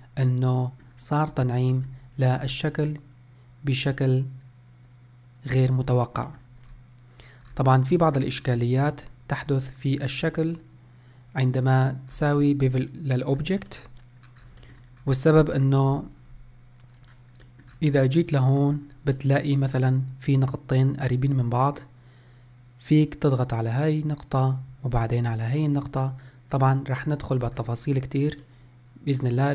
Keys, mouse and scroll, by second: 0.2-1.6 middle drag, 1.6 scroll up 3, 2.0-2.6 shift+middle drag, 2.6 scroll down 4, 3.1-6.1 middle drag, 6.1 scroll up 3, 6.4 shift+middle click, 6.9-7.6 scroll up 1, 7.6 scroll down 4, 8.2-8.6 middle drag, 8.6 scroll up 4, 9.1 shift+middle click, 9.6-10.0 scroll up 1, 10.0-10.5 scroll down 1, 10.5-12.2 middle drag, 12.2 scroll down 1, 12.8-13.4 middle drag, 13.4-13.9 scroll down 3, 13.9-14.4 middle drag, 14.4-14.8 scroll up 3, 14.8 shift+middle click, 16.1 Tab, 17.1 click, 17.6 middle click, 18.0-18.4 scroll up 2, 18.4-22.4 middle drag, 23.4 click, 25.8 shift+click, 26.7 scroll down 2, 27.1-27.6 scroll up 1, 27.7 scroll down 1, 28.0 scroll up 3, 28.6-29.5 middle drag.